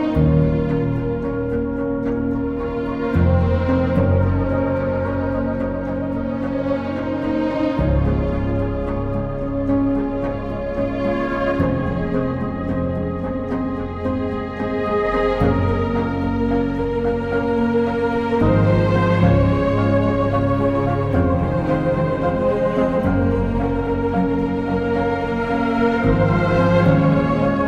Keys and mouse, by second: 1.7 click, 2.7 click, 8.4 click, 9.1 shift+middle click, 10.8 click, 11.7 click, 12.5 click, 14.5 click, 18.3 click, 19.2 click, 21.5 click, 23.2 click, 24.9 click, 25.5 Return.